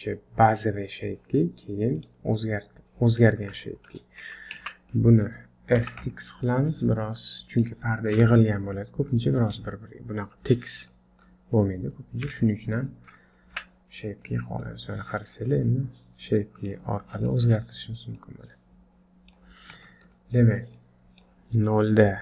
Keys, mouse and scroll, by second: 0.4 middle click, 1.9 click, 3.2 scroll up 3, 3.6 shift+middle click, 4.0 scroll down 1, 4.6 Tab, 4.9 middle click, 5.8 s, 8.1 KP_1, 10.7 scroll down 2, 10.9 middle click, 12.2 KP_1, 13.5 Tab, 14.6 click, 17.0 scroll up 1, 17.3 shift+middle click, 18.2 click, 19.9 shift+middle click, 20.7 click.